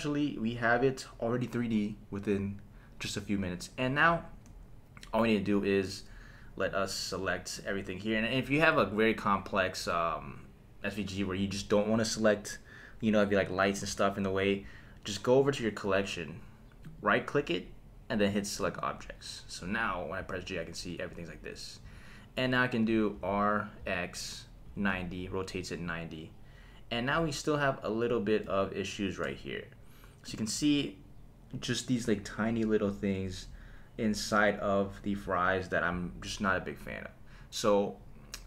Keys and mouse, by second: 6.8-8.1 drag, 13.4 click, 15.4 click, 16.8 right click, 18.5 click, 20.2 g, 21.8 Escape, 23.1 r, 23.8 x, 24.7 KP_9, 24.9 KP_0, 25.7 click, 30.4-34.2 shift+middle drag.